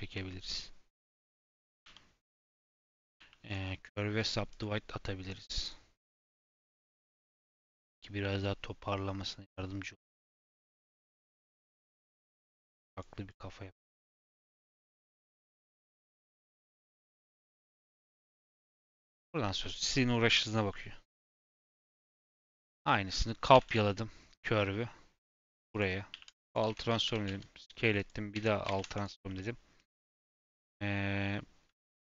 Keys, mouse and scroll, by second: 0.1 Tab, 0.9 KP_7, 1.8 g, 3.1 a, 3.4-6.6 right drag, 6.6 click, 7.0 g, 11.5 click, 11.7 g, 12.3 click, 12.4 g, 13.2 click, 13.4 g, 14.4 click, 14.6 g, 15.5 click, 16.0 scroll down 2, 16.3 Tab, 16.7-19.0 middle drag, 19.0-19.3 scroll up 2, 21.6-22.8 scroll down 2, 22.8 shift+middle click, 23.5 shift+d, 26.1 ctrl+a, 26.6 Tab, 26.9 a, 27.0 s, 28.3 Tab, 28.6 ctrl+a, 29.2 middle drag, 29.5-29.8 scroll up 1, 30.5 click, 31.7 click.